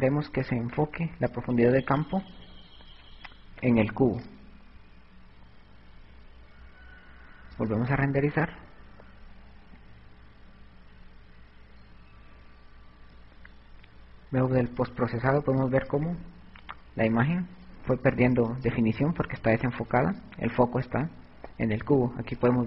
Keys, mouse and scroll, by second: 0.9 click.